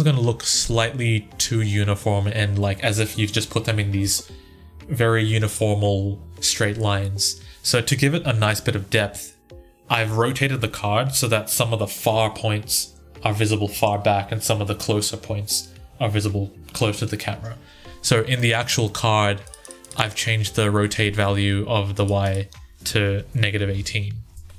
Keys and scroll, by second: 23.0-24.5 typing.